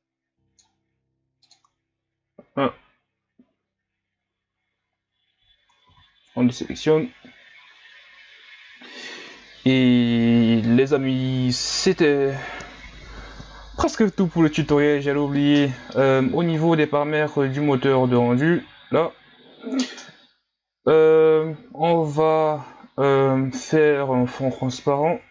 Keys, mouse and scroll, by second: 6.0 a, 16.2-17.3 scroll down 5, 17.3-19.1 scroll down 10, 19.1-19.8 scroll down 1, 19.8-21.0 scroll down 1, 21.0-21.5 scroll down 1, 21.5-22.1 scroll up 4, 22.1 scroll up 1, 22.3-24.0 scroll down 6, 24.0-24.7 scroll down 1, 24.7-25.2 scroll down 1, 25.2 click.